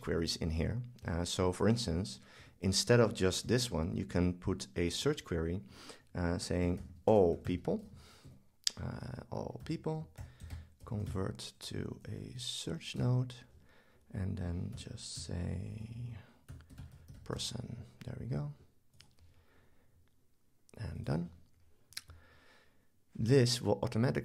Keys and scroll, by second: 10.2 super+k.